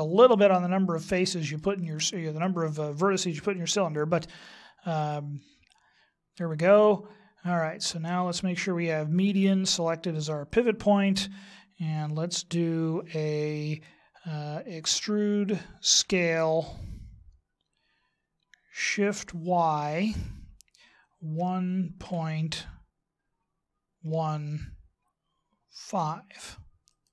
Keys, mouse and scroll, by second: 1.4 shift+right click, 5.0 middle click, 9.2 click, 10.6 click, 15.0 e.